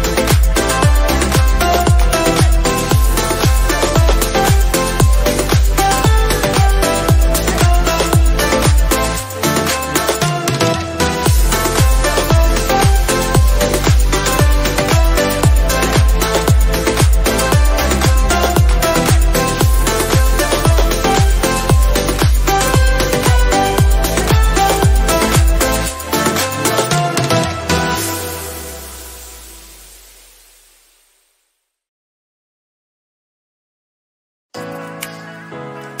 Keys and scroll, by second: 24.6 ctrl+z.